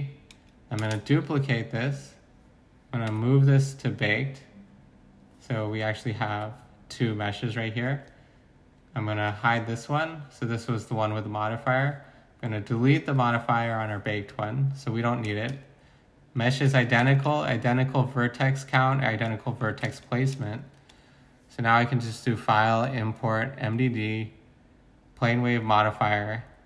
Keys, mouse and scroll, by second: 0.7-1.5 typing, 3.1 m, 5.8-6.3 typing, 15.4 z, 16.5 z, 17.1 z, 19.7 z.